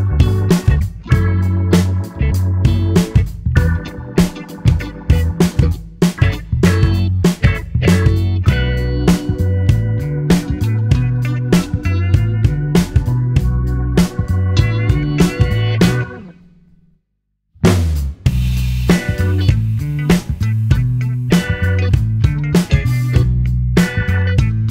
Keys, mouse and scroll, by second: 0.0 KP_1, 2.4-2.9 scroll down 1, 2.9-5.6 shift+middle drag, 5.6-8.6 drag, 15.0-18.0 drag, 23.2 g.